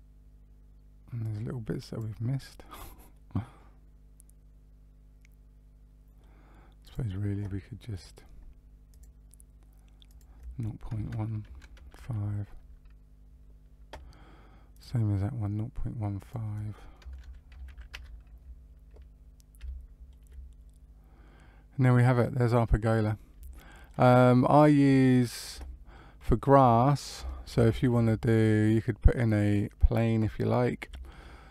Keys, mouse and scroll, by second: 1.1 click, 2.4 scroll down 1, 3.1 middle click, 6.8 click, 8.8 click, 10.0 click, 14.7 click, 16.1 click, 19.2 scroll down 1, 19.6 shift+middle click, 20.2 middle click, 23.5 shift+middle click, 24.1-25.5 scroll down 1, 25.8 shift+middle click, 27.4 shift+a, 30.8 s.